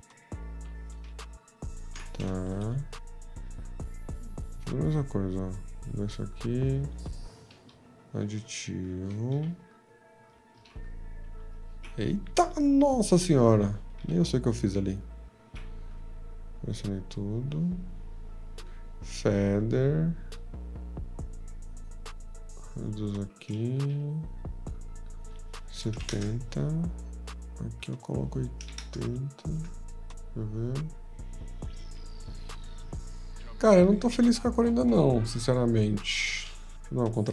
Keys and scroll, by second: 1.1 ctrl+z, 1.1 q, 2.6 m, 9.3 v, 10.5 ctrl+a, 11.7 ctrl+z, 14.0 v, 15.4 ctrl+a, 23.9 t, 25.6-30.0 typing, 36.9 ctrl+a, 36.9 F2, 36.9 ctrl+y.